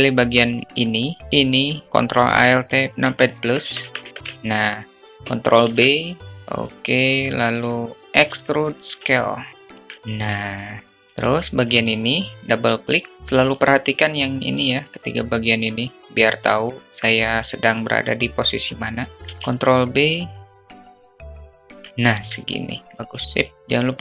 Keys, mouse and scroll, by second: 0.0 click, 5.1 ctrl+shift+b, 8.0 e, 9.6 Tab, 9.9-10.9 alt+drag, 11.3-13.1 drag, 19.2 ctrl+b, 21.5 Tab, 21.9-22.3 alt+drag.